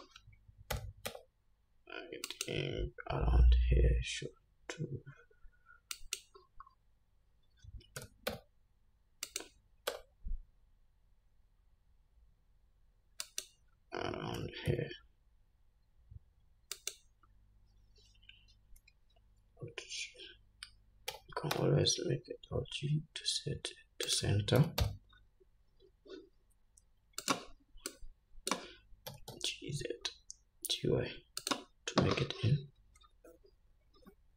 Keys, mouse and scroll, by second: 1.1 g, 3.7 s, 7.3-7.6 scroll down 1, 8.3 g, 10.2 s, 14.7 g, 19.8 alt+g, 21.4 g, 24.9 g, 28.2-31.8 drag, 29.4 g.